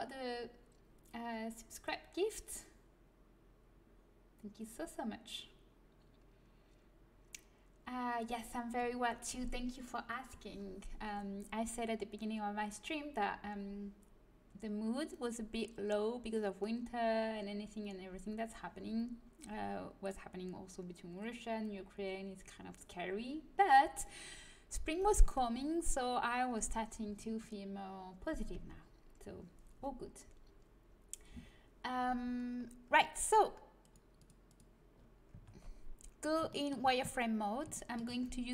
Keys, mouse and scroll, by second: 32.5-33.8 middle drag, 33.8-35.5 drag, 35.3 Tab, 35.8 middle click, 36.7 middle click, 37.1 middle click.